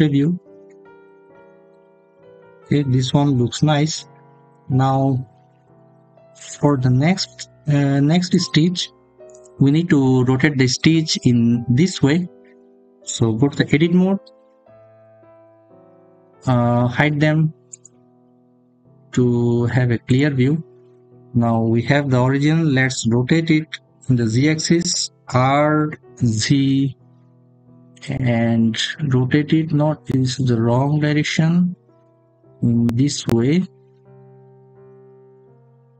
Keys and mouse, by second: 5.6 shift+drag, 8.1 click, 14.4 Tab, 17.5 click, 19.9 click, 24.7 r, 26.0 z.